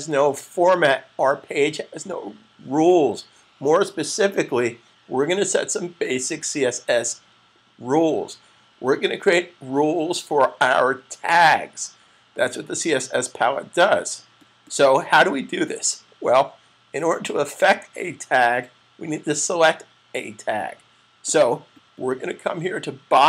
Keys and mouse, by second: 23.0 click.